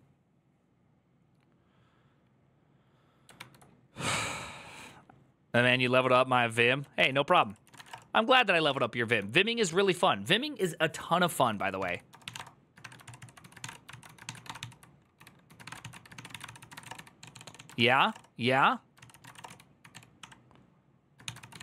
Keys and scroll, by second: 3.2 alt++, 6.8 alt+{, 7.1 ctrl+c, 7.2 ctrl+c, 7.3-8.4 typing, 10.7-21.6 typing, 18.8 ctrl+c, 18.9 ctrl+c.